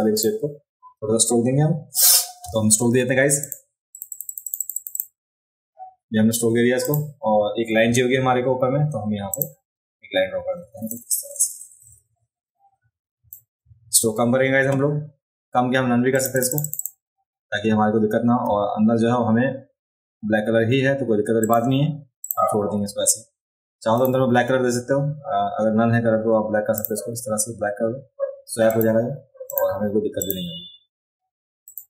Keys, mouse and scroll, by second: 0.1 click, 3.4 click, 3.9 click, 4.1 click, 4.2 click, 4.4 click, 4.6 click, 4.9 click, 6.8 click, 9.3 click, 10.9-13.3 drag, 16.1 click, 16.3 click, 16.5 click, 16.6 click, 16.8 click, 21.4 click, 22.2 click, 23.9 click, 26.8 click, 28.7 click, 29.5 click, 30.2 click, 31.7 click.